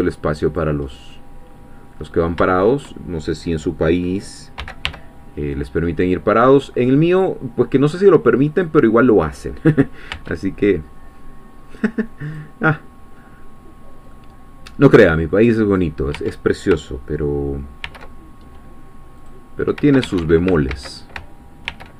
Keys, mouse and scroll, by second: 0.5 click, 0.9-2.1 middle drag, 2.2 scroll down 1, 2.5 shift+middle click, 4.6 g, 4.9 y, 8.5 click, 10.1 Tab, 12.3 click, 14.1-15.5 middle drag, 15.8 click, 16.1 Tab, 17.9 ctrl+r, 19.2 click, 20.1 Escape, 20.7 ctrl+z, 21.7 ctrl+r.